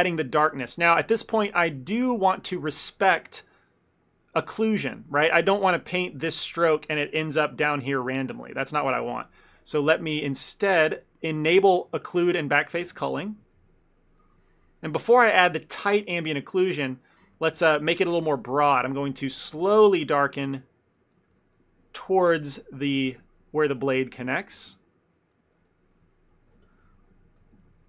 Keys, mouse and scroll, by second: 0.1 ctrl+middle click, 0.5 ctrl+z, 2.0 middle click, 4.0 middle click, 4.8 click, 6.1 click, 6.8 middle click, 7.3 middle click, 7.7 middle click, 8.3 middle click, 8.6 middle click, 9.0 middle click, 9.4 ctrl+z, 10.3 click, 12.9 f, 13.2 middle click, 13.6 shift+f, 14.5 ctrl+middle click, 14.7 middle click, 16.8 middle click, 17.2 f, 17.4 ctrl+middle click, 17.7 middle click, 18.5 click, 19.1 click, 19.4 f, 19.7 ctrl+middle click, 20.0 click, 20.2 click, 20.4 click, 20.6 middle click, 21.0 click, 21.2 click, 21.4 click, 21.7 click, 21.9 middle click, 22.5 click, 22.7 click, 23.4 click, 23.5 middle click, 23.9 click, 24.6 f, 24.8 ctrl+middle click, 25.0 middle click, 25.4 click, 25.6 click, 26.0 middle click, 26.2 ctrl+middle click, 26.4 ctrl+middle click, 26.6 f, 27.7 ctrl+middle click.